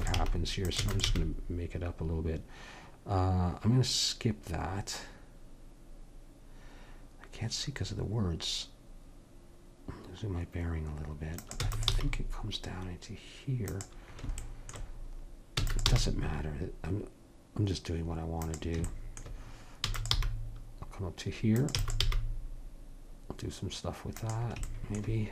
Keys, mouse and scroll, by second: 0.0 e, 0.2 g, 0.9 e, 1.2 g, 11.6 e, 12.0 g, 15.6 e, 15.9 g, 19.9 e, 20.2 g, 21.8 e, 22.1 g.